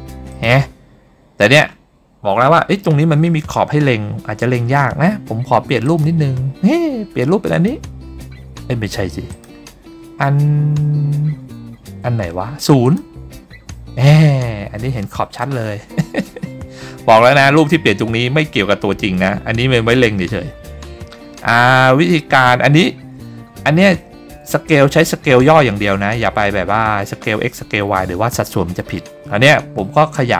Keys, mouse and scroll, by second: 0.6 click, 6.0 click, 9.5-13.6 drag, 16.1 scroll up 2, 16.8 scroll down 2, 20.7-21.2 scroll up 1, 21.2-22.1 scroll down 1, 22.1-22.8 scroll up 1, 22.8 scroll down 2, 24.6 s.